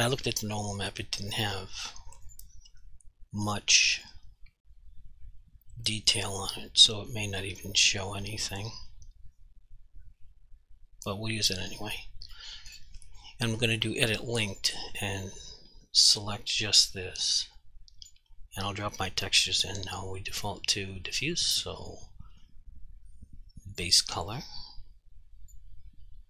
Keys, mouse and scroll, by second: 2.4 click, 12.4 right click, 12.8 double click, 14.1 click, 17.7 click, 23.8 click, 24.5 click.